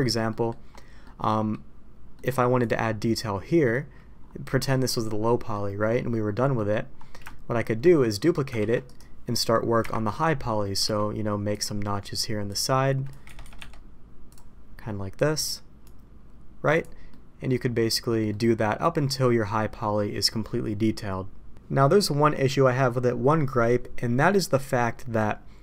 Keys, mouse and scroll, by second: 0.2 middle drag, 1.0-1.5 middle drag, 2.1 middle click, 2.5 middle click, 4.5 middle click, 5.3 middle click, 6.5 middle drag, 7.2-7.6 shift+middle drag, 8.5 shift+d, 9.8 KP_Divide, 10.8 d, 12.4 click, 13.5 Escape, 14.2 click, 15.1-16.8 drag, 17.0-17.4 middle drag, 18.2 middle click, 21.7-22.4 middle drag.